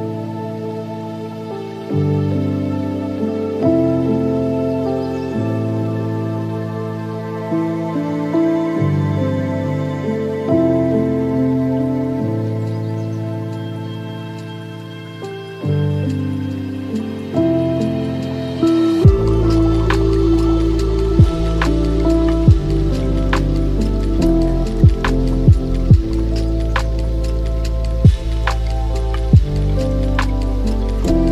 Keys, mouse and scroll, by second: 0.6-1.3 scroll up 9, 1.3 middle click, 1.9-2.6 scroll up 4, 2.6 drag, 3.8-4.9 middle drag, 4.9 click, 8.3-8.8 scroll down 3, 8.8-9.9 middle drag, 9.9 scroll up 4, 10.7-13.7 drag, 15.0-20.3 drag, 20.3 scroll down 3, 20.6-22.3 middle drag, 22.3-22.7 scroll up 3, 22.7-25.8 shift+drag, 27.9-28.3 scroll down 5, 28.3-29.6 middle drag, 29.6-31.3 drag.